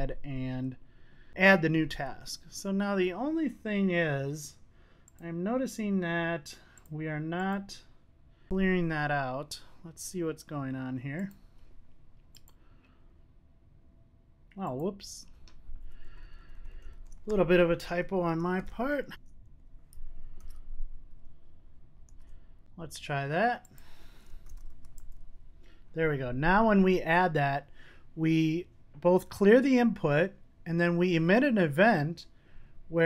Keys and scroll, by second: 21.6 super+s.